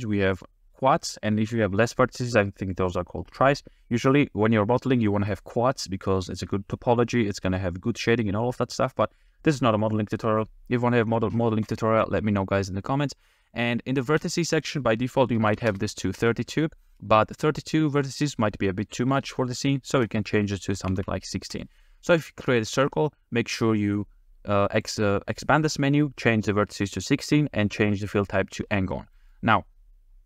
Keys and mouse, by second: 14.2-15.7 drag, 20.0-21.6 drag, 25.5 click, 29.2 click.